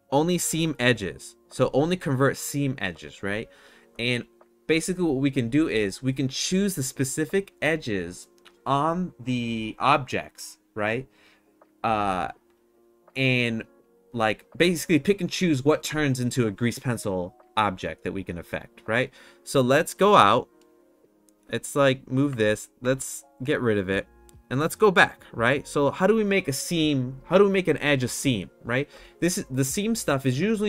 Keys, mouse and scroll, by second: 21.4 click, 22.3 ctrl+z, 22.8 ctrl+z.